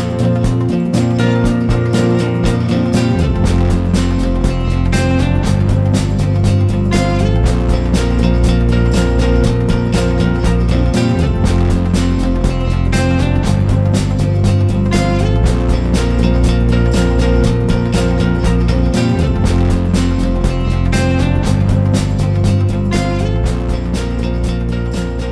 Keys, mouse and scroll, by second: 0.1-6.3 drag, 7.7-11.9 drag, 11.7 Delete, 12.6-13.2 ctrl+scroll down 2, 13.6 click, 19.2 shift+click, 20.8 shift+click, 22.1-25.3 drag.